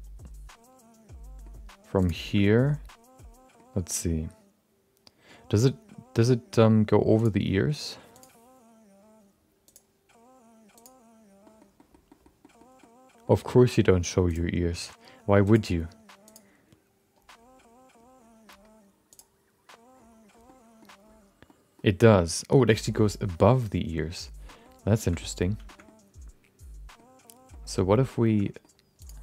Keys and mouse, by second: 2.0 click, 2.2 shift+middle click, 2.5-3.5 middle drag, 9.8-10.9 drag, 11.5 middle click, 12.1 middle click, 12.5 middle click, 12.9 middle click, 20.4 middle click, 21.6 middle click, 24.4 middle click, 25.0 shift+middle click, 25.1 middle click, 25.6 shift+middle click, 25.8-26.9 middle drag, 27.5 middle click, 28.3 shift+middle click, 28.4 middle click, 29.0 click.